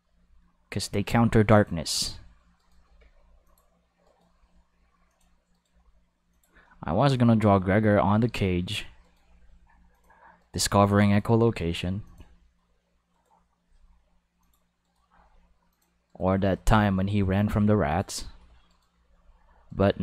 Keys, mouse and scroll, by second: 1.5 click, 1.9 right click, 2.6 right click, 2.8 g, 3.4 click, 4.0 right click, 4.3 g, 5.1 click, 5.5 right click, 5.7 g, 6.3 click, 7.4 right click, 7.8 g, 8.6 click, 9.0 right click, 9.3 g, 9.9 click, 10.4 right click, 11.0 right click, 11.3 g, 12.0 click, 13.1-13.6 right drag, 13.6 g, 14.4 click, 14.8 right click, 15.0 g, 15.7 click, 16.1 right click, 16.4 g, 17.9 click, 18.7 right click, 19.0 g, 19.7 right click.